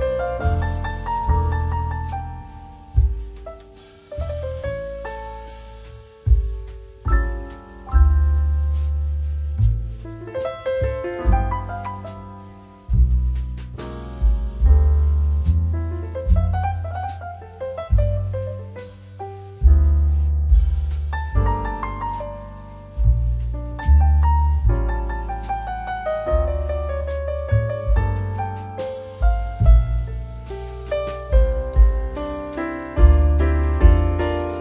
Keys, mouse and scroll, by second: 0.3-5.9 drag, 5.9 space, 6.2 click, 6.4 space, 7.5-10.3 drag, 10.3 space, 10.5 click, 11.1 space, 11.4 click, 11.5 space, 11.7-14.3 drag, 19.8-22.7 drag, 22.7 scroll down 1, 24.5-33.2 drag, 33.3-34.6 drag.